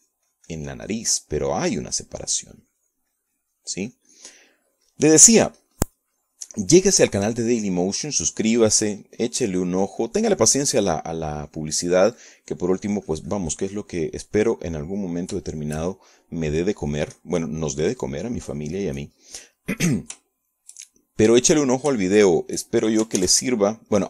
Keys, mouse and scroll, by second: 3.9-9.5 ctrl+drag, 10.2-16.0 drag, 17.3 shift+click, 17.4 shift+click, 17.5 shift+middle click, 18.6 click, 19.5 middle click, 19.9-21.5 drag, 21.6-22.9 middle drag, 23.5 shift+click.